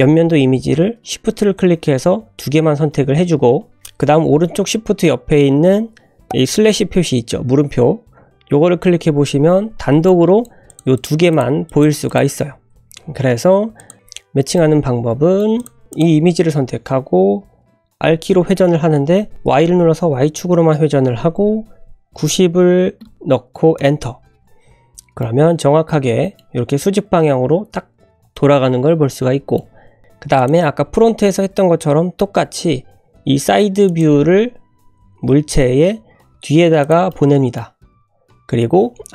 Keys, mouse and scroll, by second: 8.9 /, 9.7 scroll up 1, 10.0-10.4 middle drag, 10.4 scroll down 1, 10.6 click, 10.9 click, 11.3 click, 11.6 click, 12.0 click, 12.3-12.8 scroll down 1, 12.8 `, 13.2-13.7 scroll up 3, 13.7 click, 14.1-14.4 drag, 14.4 scroll down 1, 14.5-15.3 middle drag, 15.5 click, 15.9 click, 18.0 r, 19.0 typing, 24.7 scroll up 2, 25.2-26.3 middle drag, 26.4 `, 28.3-29.5 middle drag, 30.3 click, 30.7 g, 34.6-35.2 scroll down 2, 35.2 g, 37.1-37.5 middle drag, 38.7-39.1 scroll up 1.